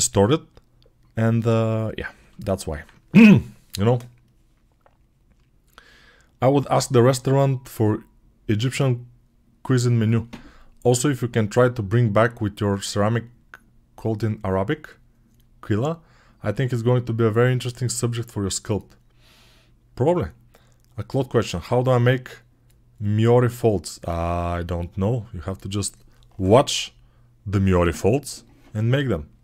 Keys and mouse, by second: 2.5-29.4 alt+shift+middle drag.